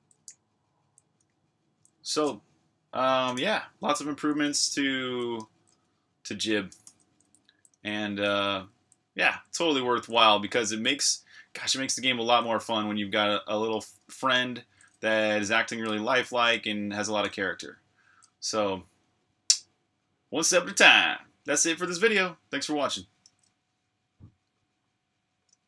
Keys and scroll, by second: 0.1-1.9 typing, 3.0-5.0 typing, 6.8-12.9 typing, 16.1-19.7 typing, 23.3 super+q.